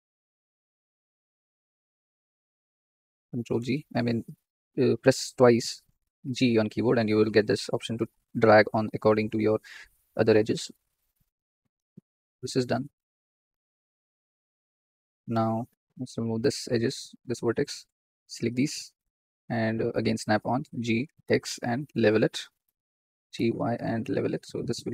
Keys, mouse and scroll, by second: 0.0-0.4 scroll up 7, 0.8 click, 1.4 shift+click, 1.8 shift+click, 2.3-3.6 shift+drag, 3.6 g, 6.5-7.0 scroll down 3, 7.4 scroll up 2, 7.8-10.0 shift+middle drag, 10.4 shift+middle click, 10.9 scroll down 2, 11.3-13.3 shift+middle drag, 13.4-15.6 shift+middle drag, 15.6 click, 16.5 x, 17.9 click, 19.9 click, 20.6 g, 22.5 click, 23.1 g, 24.3 click.